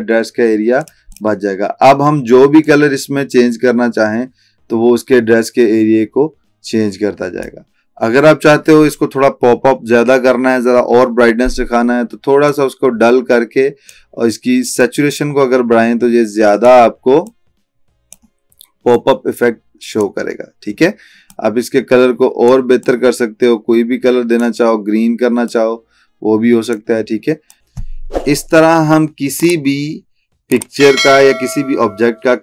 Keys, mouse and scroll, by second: 3.0-7.7 drag, 12.6-14.1 drag, 25.9-26.8 click.